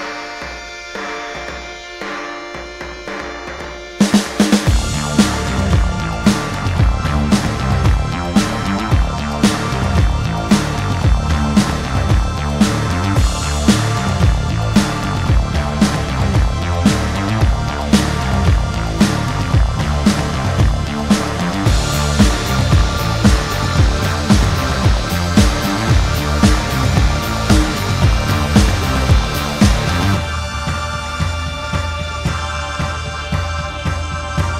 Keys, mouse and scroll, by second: 4.3 shift+click, 5.8 shift+middle click, 6.1-6.5 scroll up 2, 7.8 shift+middle click, 9.4 shift+click, 9.9 middle click, 11.8 middle click, 14.5 g, 14.9 middle click, 15.7 shift+middle click, 17.1 ctrl+click, 18.2 g, 19.2 right click, 19.5 q, 19.7 e, 19.8 y, 21.0 Tab, 21.2 scroll down 3, 21.4 middle click, 22.8 scroll up 1, 23.6 ctrl+s, 24.5 t, 26.5 m, 27.3 m, 27.8 m, 28.6-29.0 scroll down 1, 29.0 middle click, 32.4 middle click.